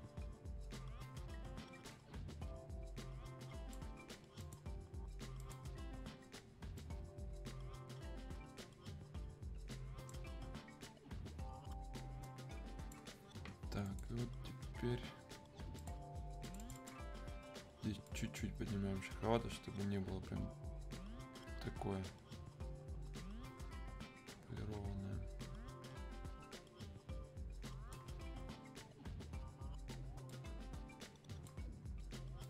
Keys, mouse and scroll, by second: 12.2-28.0 drag, 30.3-32.4 drag.